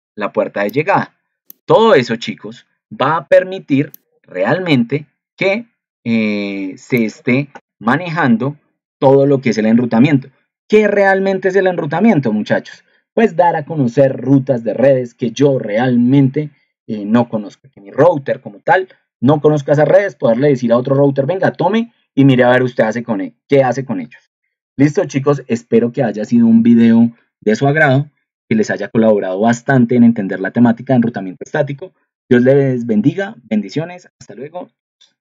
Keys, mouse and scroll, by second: 12.4 ctrl+alt+2, 24.2 ctrl+alt+1.